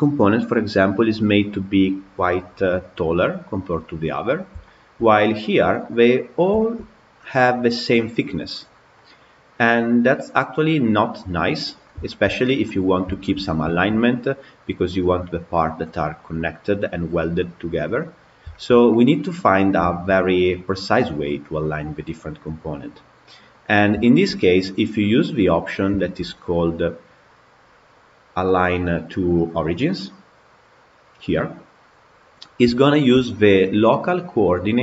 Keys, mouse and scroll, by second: 4.1-4.5 scroll down 5, 4.5-4.9 shift+middle drag, 4.9-5.6 scroll up 6, 5.6-7.4 middle drag, 7.4 scroll up 2, 8.8-11.6 middle drag, 11.6 scroll down 4, 11.9 scroll up 1, 11.9 shift+middle drag, 12.1 scroll down 1, 12.5-13.9 middle drag, 13.9-14.5 scroll up 6, 14.8 click, 17.9-18.4 scroll down 3, 18.4-19.4 shift+middle drag, 19.4-19.7 scroll down 3, 19.7 shift+middle click, 20.3 scroll up 2, 22.9-23.4 scroll up 2, 23.4 click, 23.9-25.1 shift+middle drag, 25.1-25.8 scroll down 7, 25.8 shift+middle click, 26.3 click, 27.5-29.7 scroll down 12, 31.9-32.6 scroll up 9, 32.6-34.8 shift+middle drag.